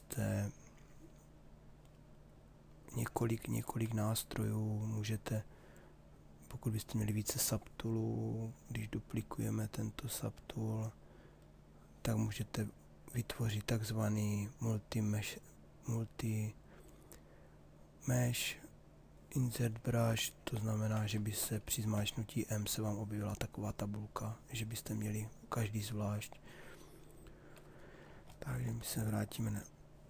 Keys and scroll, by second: 21.5 m.